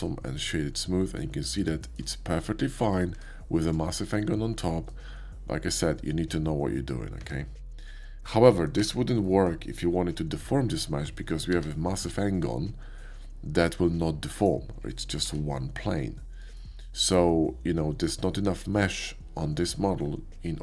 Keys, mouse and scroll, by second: 0.3 middle click, 1.1 middle click, 2.1-2.7 shift+middle drag, 3.0 shift+middle click, 3.1 Tab, 3.7 middle click, 7.2 Tab, 8.0 middle click, 8.8 Tab, 9.8-14.4 middle drag, 11.5 g, 14.1 g, 14.4 click, 14.5-15.5 middle drag, 15.3 r, 16.4 click.